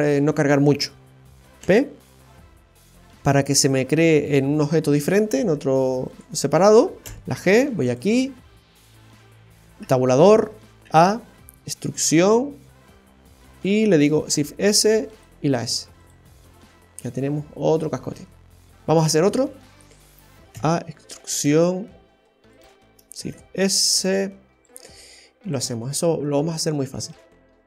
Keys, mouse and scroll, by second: 5.5 Tab, 6.1 right click, 8.1 middle click, 9.8 Tab, 14.2 shift+s, 16.3 middle click, 17.9-18.8 scroll down 3, 18.2 middle click, 18.9 shift+middle click, 19.4-19.9 scroll up 2, 19.9 Tab, 23.3 shift+s, 24.1 shift+s, 25.8-26.2 scroll down 1, 26.2 middle click, 27.1 Tab, 27.4 right click.